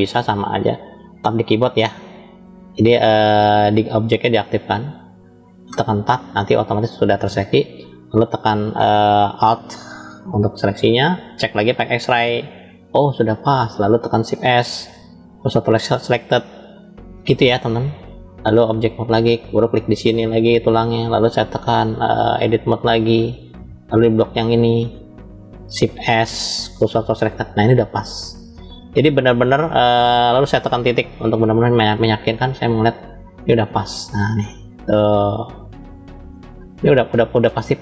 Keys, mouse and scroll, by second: 1.0 Tab, 2.0 click, 3.6 click, 4.4 drag, 4.9 click, 5.6 Tab, 9.9 alt+click, 11.5 click, 12.5 click, 14.3 shift+s, 16.9-18.3 drag, 20.0 click, 22.5-23.2 drag, 24.1 click, 24.3 click, 25.8 shift+s, 28.3-29.7 middle drag, 30.7 KP_Decimal, 31.5 scroll down 2, 33.0-33.8 scroll down 12, 34.1-37.8 middle drag.